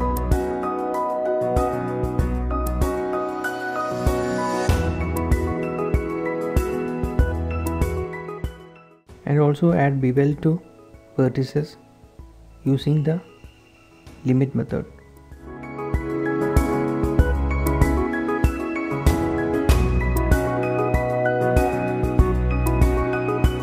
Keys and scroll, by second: 0.7 b, 1.3 Escape, 1.5 b, 2.8 typing, 4.2 shift+z, 5.3 typing, 7.5-9.4 typing, 8.7 ctrl+shift+s, 9.1 Tab, 10.8 ctrl+s, 16.9 Tab.